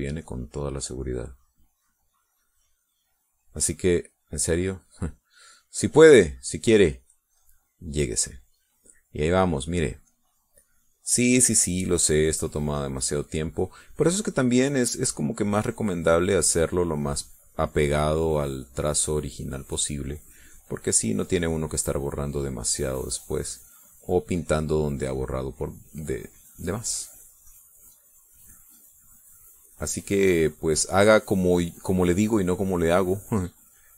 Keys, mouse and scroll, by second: 2.2-4.4 drag, 4.6 middle click, 5.4 middle click, 8.2-13.5 drag, 14.3-18.4 drag, 18.7 middle click, 19.6-22.6 drag, 23.2-31.4 drag, 33.1-33.9 drag.